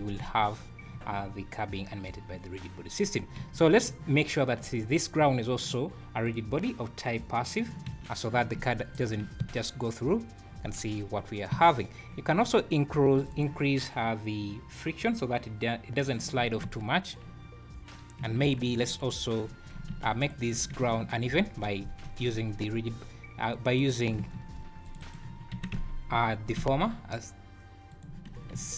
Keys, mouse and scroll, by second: 0.2 `, 0.9 `, 3.0 click, 3.4 `, 5.2 `, 6.2 click, 7.0 click, 7.9 `, 8.9 shift+right click, 9.4 space, 10.6-11.0 scroll down 4, 11.5 Escape, 12.1 `, 12.4-12.7 scroll up 5, 13.0 scroll down 1, 13.0 `, 13.2 click, 15.1 click, 16.6 space, 17.4 scroll down 3, 18.2 Escape, 18.4 click, 18.9 Tab, 18.9-19.2 scroll up 5, 19.4 scroll down 1, 19.5 Tab, 19.9 ctrl+a, 20.5 Tab, 21.2 ctrl+r, 23.8 ctrl+r, 25.2 a, 25.6 s, 28.4 scroll down 5.